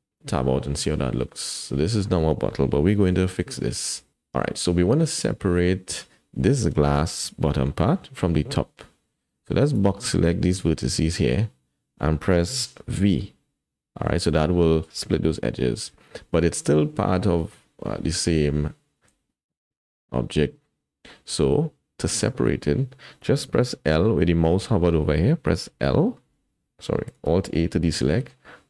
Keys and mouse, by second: 0.3 Tab, 0.9-2.0 drag, 3.3 KP_1, 3.7 Tab, 4.1 alt+z, 9.7 click, 10.0 click, 13.1 v, 16.3 Tab, 16.9-17.5 drag, 19.1 alt+z, 19.5-21.1 drag, 21.4 Tab, 25.7 l, 26.2 l, 27.3 alt+a, 28.2 click.